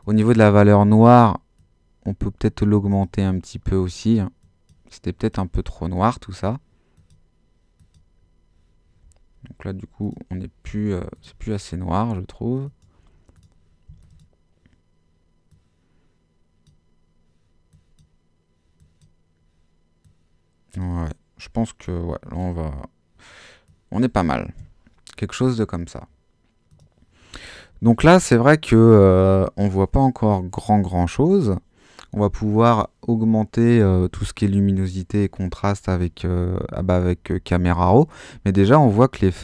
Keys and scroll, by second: 10.7 Escape.